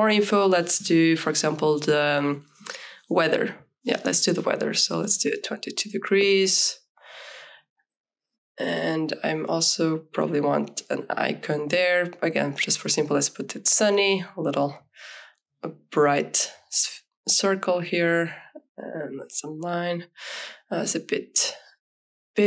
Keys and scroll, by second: 0.5 v, 3.1 i, 5.4 2, 5.9 shift+c, 6.3 BackSpace, 10.0 v, 21.4 Up, 22.0 Left.